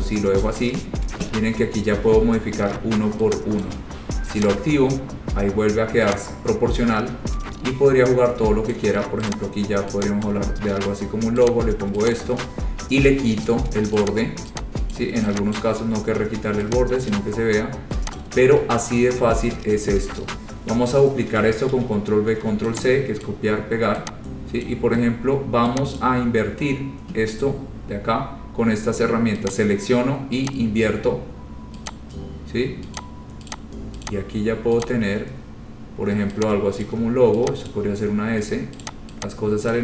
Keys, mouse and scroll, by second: 0.6 click, 3.8 click, 4.6 click, 8.9 click, 9.5 click, 9.8 scroll, 10.5 click, 11.6 click, 12.4 click, 13.7 right click, 14.2 click, 15.1 click, 15.7 click, 16.2-16.6 scroll, 17.2-18.0 scroll down 8, 17.3 click, 18.3 click, 18.7 scroll down 2, 19.2 scroll, 21.9 ctrl+c, 22.4 ctrl+v, 23.4 click, 24.8 click, 26.2 click, 26.4-26.8 scroll, 29.7 click, 30.6 click, 32.0 click, 33.2 click, 33.7 click, 34.2 click, 35.0 click, 37.0 shift+click, 37.2 shift+click, 37.8 click, 38.2 shift+click, 38.2 scroll, 39.0 shift+click.